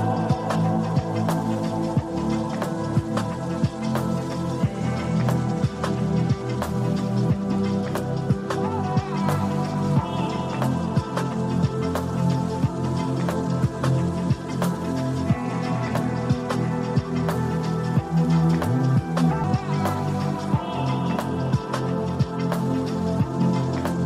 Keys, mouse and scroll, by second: 0.0-3.1 typing, 0.6 click, 1.3 click, 3.1 click, 4.2-5.3 drag, 7.2 click, 7.9 click, 10.9 click, 13.2-14.8 drag, 15.2 click, 16.1 click, 17.0 shift+click, 19.2 KP_1, 19.4 ctrl+z, 19.7 click, 22.6 click.